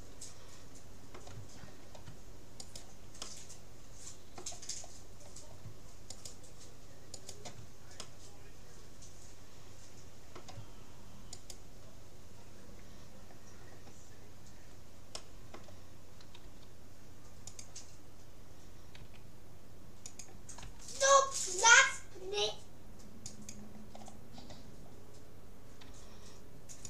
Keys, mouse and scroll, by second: 2.7-4.3 right drag, 3.3-4.5 drag, 4.5 middle click, 5.1 scroll up 1, 5.3-6.7 middle drag, 6.1-8.9 right drag, 8.1-9.9 middle drag, 11.3-13.1 right drag, 14.5 middle click, 15.3-16.9 middle drag, 16.4 g, 19.1 s, 20.7 r, 24.1-26.3 middle drag, 25.8 g.